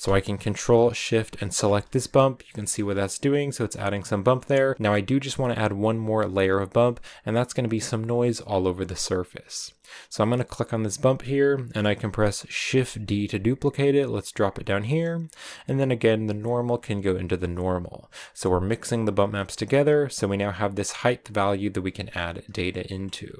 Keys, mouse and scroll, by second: 1.5 ctrl+shift+click, 2.1-3.1 scroll up 5, 2.5 shift+middle click, 4.2-9.8 middle drag, 9.8-12.5 drag, 12.5 shift+d, 17.3 click, 18.4 click, 21.8 click.